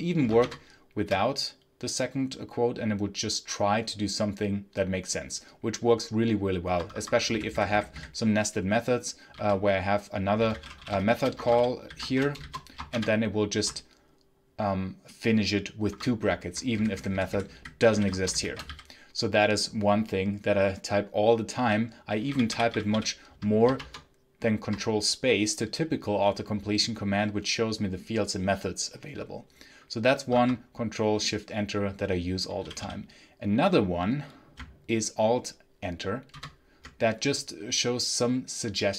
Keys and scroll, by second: 0.3 ctrl+shift+Return, 6.5 Escape, 6.8 Escape, 7.2 b, 7.4 b, 7.6 b, 7.8 b, 9.2-12.7 typing, 12.8 ctrl+shift+Return, 15.7 Escape, 16.6-19.0 typing, 21.8-23.2 typing, 23.6 ctrl+space, 30.2 Escape, 32.5 l, 36.2 alt+Return.